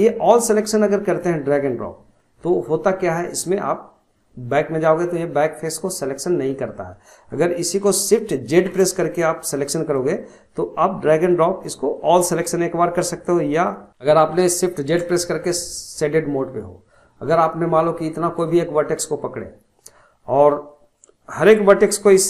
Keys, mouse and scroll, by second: 0.4 click, 1.8-2.2 scroll down 1, 2.2-5.2 middle drag, 8.7 shift+z, 9.7 click, 12.0-14.9 middle drag, 14.9 shift+z, 18.3 click.